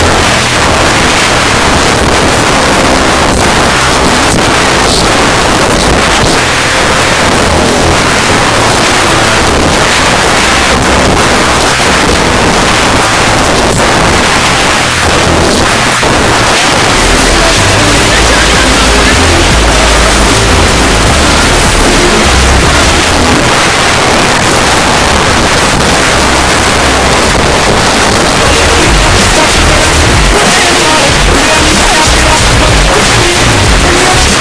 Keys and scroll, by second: 0.0 Up, 0.0 Return, 23.0 Page_Down.